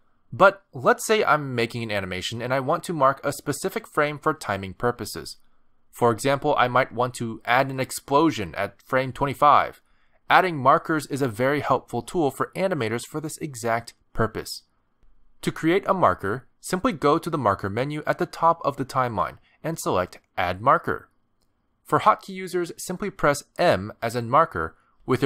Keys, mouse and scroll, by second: 4.5 space, 5.7 click, 6.5 click, 7.6 click, 9.7 click, 12.0 click, 15.3 middle click, 19.5 click, 19.6 click.